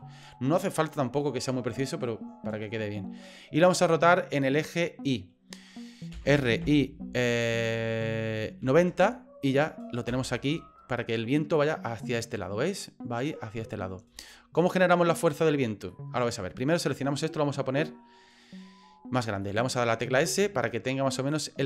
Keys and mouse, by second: 6.1 r, 11.6-13.4 middle drag, 13.7 middle click, 14.3 shift+middle click, 14.8 middle click, 15.9 middle click, 19.4 middle click, 20.1 s.